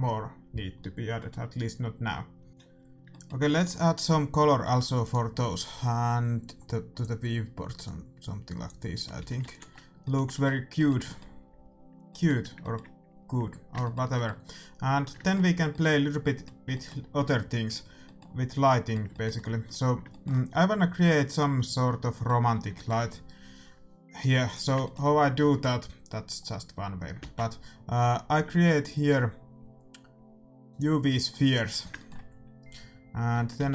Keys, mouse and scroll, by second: 3.0 middle click, 5.0-6.7 right drag, 6.9-8.7 drag, 8.9-24.4 middle drag, 9.1 a, 9.4 ctrl+s, 24.4-26.1 drag, 26.1-27.2 middle drag, 27.2 shift+a, 31.3-31.6 scroll up 1, 31.6-33.7 middle drag, 33.3 Tab, 33.5 s.